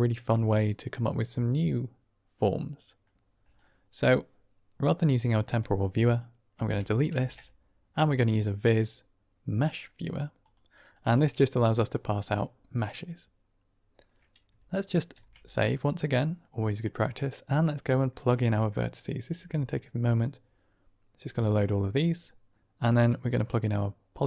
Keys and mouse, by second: 0.5-3.1 middle drag, 3.7 middle click, 5.5 click, 6.5-7.1 typing, 15.1 ctrl+s, 17.0-21.2 drag, 22.9-24.2 drag.